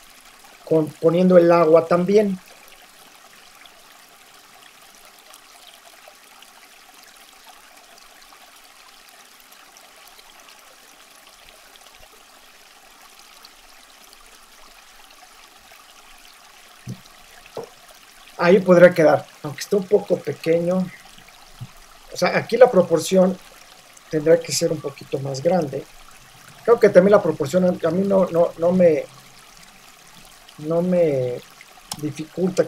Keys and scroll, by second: 7.0 super+v, 8.9 super+-, 9.0 shift+super+t, 11.1 Return, 11.5 super+0, 15.1 v, 15.2 super+t, 16.7 Return, 25.8 super+t, 26.5 shift+super+t, 31.9 shift+Return.